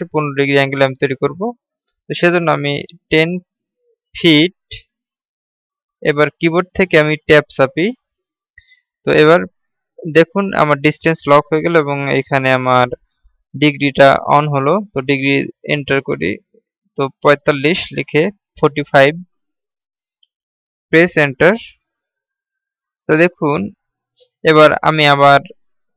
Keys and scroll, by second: 6.9 Tab.